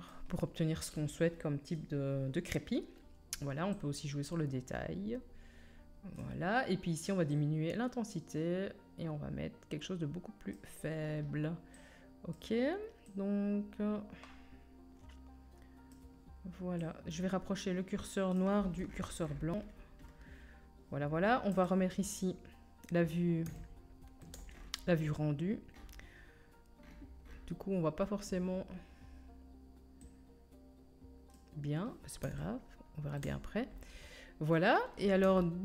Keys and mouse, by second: 21.8-30.0 drag, 30.0-35.6 middle drag.